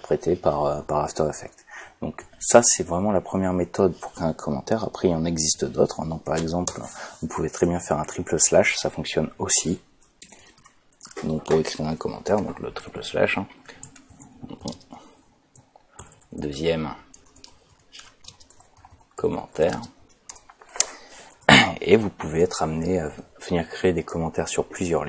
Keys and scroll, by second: 6.7 Return, 7.6 /, 10.2 BackSpace, 12.8-20.1 typing, 20.3 Return.